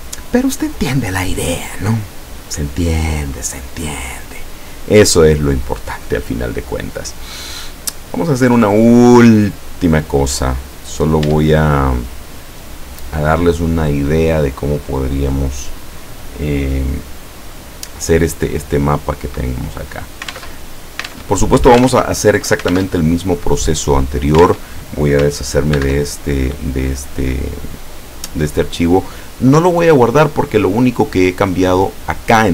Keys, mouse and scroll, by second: 3.5 click, 6.3 click, 7.6-8.7 middle drag, 8.8 scroll down 1, 9.6-10.6 middle drag, 10.7 scroll up 1, 11.3 Tab, 12.1 right click, 20.4 alt+Tab, 21.2 alt+Tab, 21.9 alt+Tab, 22.8 alt+Tab, 24.5 alt+Tab, 25.8 ctrl+w.